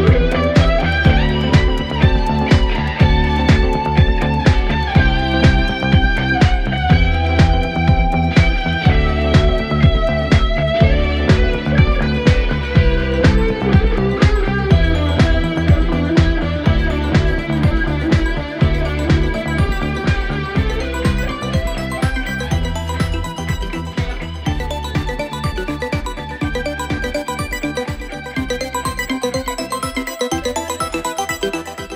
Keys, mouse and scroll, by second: 0.6 shift+d, 1.1 g, 3.1-4.6 middle drag, 4.7 middle click, 5.5-7.8 typing, 7.2 drag, 9.8 g, 10.7 click, 10.9-11.8 middle drag, 11.8 g, 12.7 click, 13.6 ctrl+z, 13.9 g, 14.8 click, 15.2 KP_7, 15.5 scroll down 4, 15.7 shift+a, 17.6 s, 22.3 g, 23.8-24.3 scroll up 4, 24.3 s, 25.9 g, 27.5 h, 27.6 u, 28.0 ctrl+z, 28.4 h, 29.0 ctrl+z, 29.4 g.